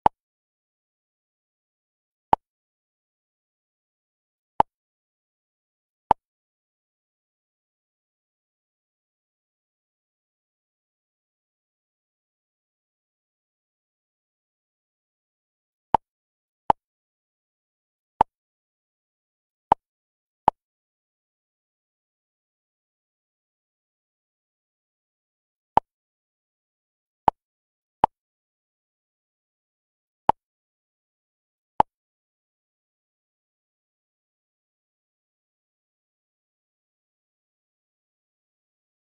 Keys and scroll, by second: 6.9 Up, 13.0 Up, 13.9 Left, 36.1 Down, 36.5 Left.